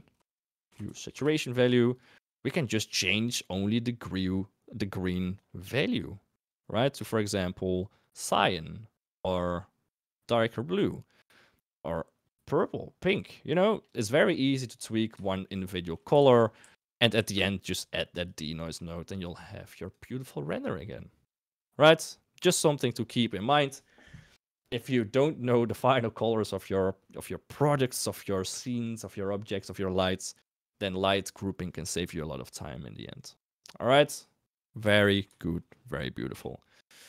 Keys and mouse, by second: 2.3 click, 5.3-13.9 drag, 15.3 shift+click, 15.8 shift+click, 16.1 shift+a, 19.3 click, 20.6 click, 32.2 middle click, 35.4 shift+drag, 36.3 KP_1.